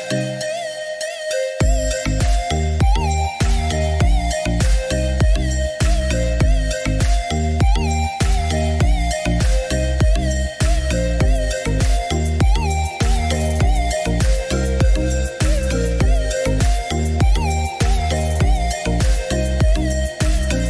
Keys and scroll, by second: 4.1 Escape.